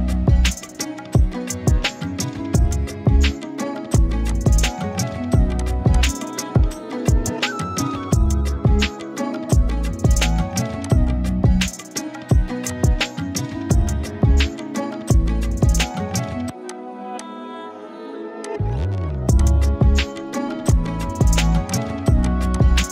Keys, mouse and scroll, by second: 2.8 click, 3.3 z, 4.0 click, 4.2 space, 4.3-4.9 click, 4.8 space, 5.6 click, 11.6-12.7 scroll up 1, 12.7-15.8 drag, 15.8 right click, 16.7 click.